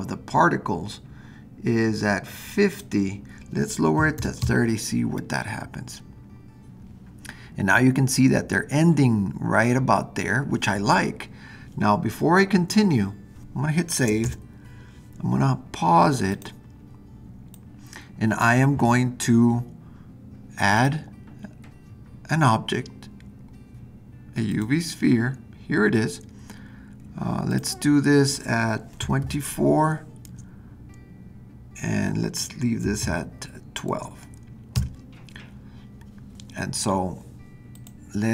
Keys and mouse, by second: 2.7-6.6 drag, 14.2 super+s, 16.3 click, 17.5-18.5 drag, 20.7-25.9 drag, 27.5-35.6 drag, 37.7 click.